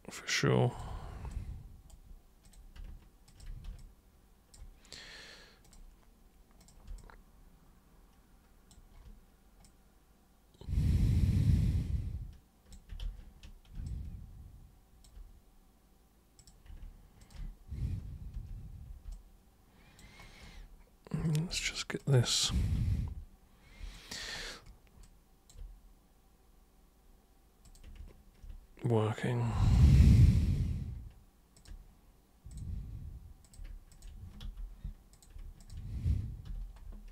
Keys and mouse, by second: 1.3 super+right click, 2.4 super+click, 3.2 ctrl+shift+super+click, 3.7 alt+super+click, 5.6 super+click, 6.6 super+click, 7.0-8.7 alt+super+drag, 9.6-12.7 alt+super+drag, 13.0 ctrl+super+z, 13.8-15.0 alt+super+drag, 16.4 super+click, 17.2 ctrl+shift+super+click, 18.3 super+g, 19.1 alt+super+click, 21.2 super+click, 22.0 ctrl+shift+super+click, 22.7 super+g, 23.9 alt+super+drag, 25.0 alt+super+click, 27.6 super+click, 29.6 super+click, 31.5 ctrl+super+click, 32.4 super+click, 33.4 super+click, 33.9 ctrl+shift+super+click, 34.4 super+g, 35.1 super+click, 35.6 ctrl+shift+super+click, 36.4 super+g.